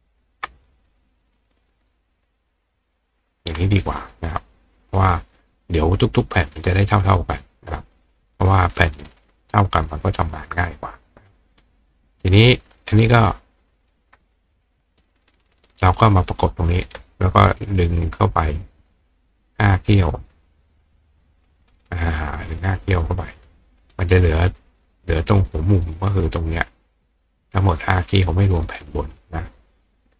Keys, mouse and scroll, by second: 1.6-3.1 ctrl+drag, 3.6 click, 3.6-5.1 right drag, 4.6 click, 11.5 click, 12.4-13.9 drag, 15.6-16.7 drag, 16.5 right click, 18.1-20.9 drag, 21.6 click, 22.6 click, 23.8 right click, 25.5 click, 27.4 right click, 28.6 click.